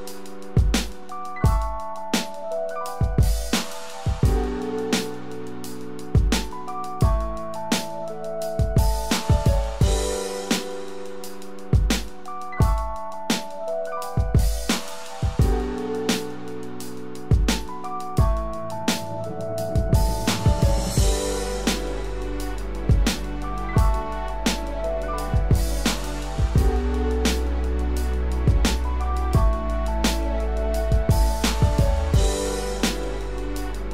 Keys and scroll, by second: 23.5 ctrl+d, 30.3 ctrl+Return, 32.2 ctrl+d.